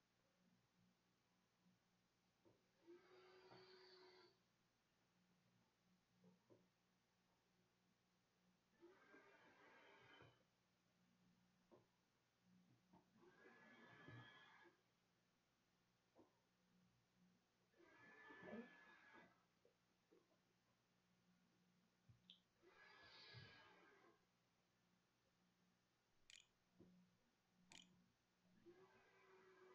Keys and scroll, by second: 26.3-29.6 typing.